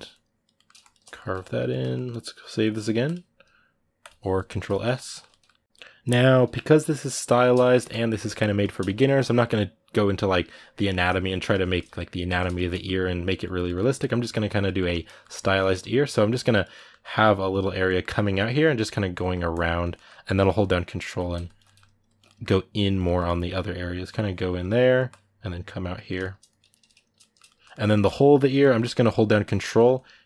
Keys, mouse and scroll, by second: 0.3 ctrl+middle click, 0.6 shift+click, 0.9-6.2 ctrl+middle drag, 6.2 f, 7.2-13.8 shift+middle drag, 13.8 click, 14.5 ctrl+middle click, 15.2 click, 15.3 middle click, 15.6 click, 16.5 middle click, 17.1 click, 17.6 middle click, 17.9-18.9 drag, 18.9 middle click, 19.3 click, 19.7 middle click, 20.1-21.4 ctrl+drag, 21.4 middle click, 21.8 ctrl+click, 22.0 middle click, 22.3 ctrl+click, 22.8 middle click, 23.0-25.9 ctrl+drag, 25.9 middle click, 26.3 click, 27.0-28.0 shift+middle drag, 28.0 ctrl+click, 28.4 middle click, 28.6 ctrl+click, 29.5 middle click, 29.7 ctrl+click.